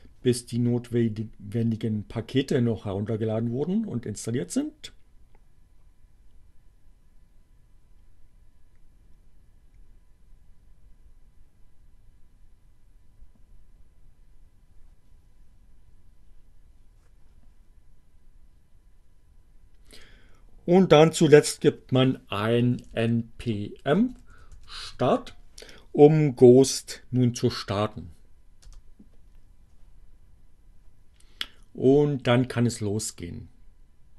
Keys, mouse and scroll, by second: 21.2-25.4 typing, 28.8 Return.